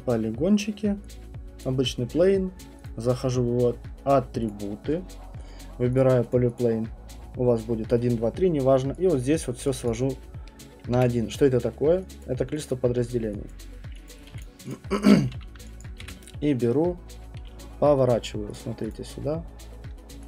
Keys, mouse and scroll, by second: 1.6 click, 2.8 click, 4.5 click, 6.0 click, 6.3 click, 6.6 click, 9.1 click, 9.9 click, 10.5 middle click, 10.9 middle click, 10.9 f, 12.2 click, 12.7 click, 13.5 click, 14.1 click, 14.3 q, 14.4 click, 14.7 click, 14.9 middle click, 15.0 middle click, 15.4 w, 15.8 alt+click, 16.0 alt+click, 16.0 e, 18.5 click, 18.9 click, 19.9-20.2 typing.